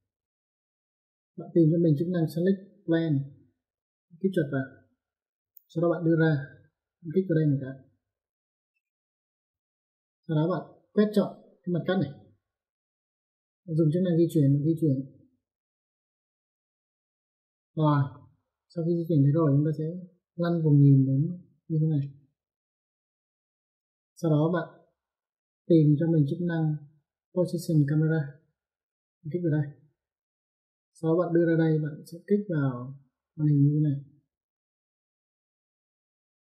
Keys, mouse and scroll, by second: 4.5 click, 8.3 click, 9.0 middle click, 11.3 click, 14.3 click, 15.5 click, 18.3 middle click, 21.4 middle click, 23.2 middle click, 29.4 click, 35.2 click.